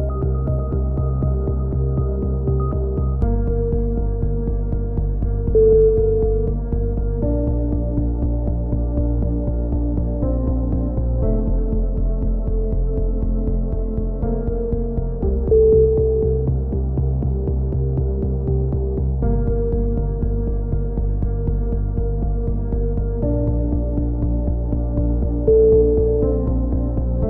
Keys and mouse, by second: 0.7 a, 0.8 z, 1.2 Tab, 1.4 click, 1.9-3.4 drag, 3.4-5.2 typing, 4.5 Tab, 5.2 click, 6.8 click, 8.3 click, 8.6 ctrl+r, 9.6 a, 10.0 ctrl+r, 11.9 a, 12.0 KP_7, 12.5 k, 13.9 a, 14.1 click, 16.0 ctrl+r, 16.6-19.6 typing, 17.3 ctrl+r, 19.3 right click, 21.0 right click, 21.3 g, 21.9 a, 22.0 z, 22.1 z, 22.2 click, 22.6-23.8 right drag, 23.1 f, 23.8-26.5 drag, 26.5 k.